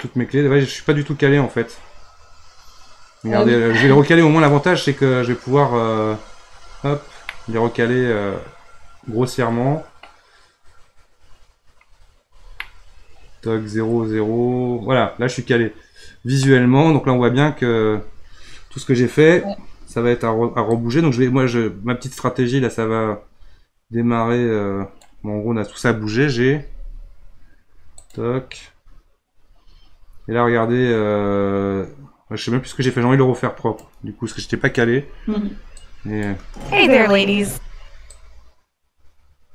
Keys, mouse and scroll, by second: 0.0-3.2 middle drag, 6.6 scroll down 1, 7.2-10.4 middle drag, 11.3-12.0 scroll down 2, 12.6-15.7 middle drag, 20.7-26.6 drag, 26.6 g, 32.8-35.1 drag, 35.1 Delete, 35.8-36.4 drag, 36.4 space, 37.4 space, 38.2-39.5 drag.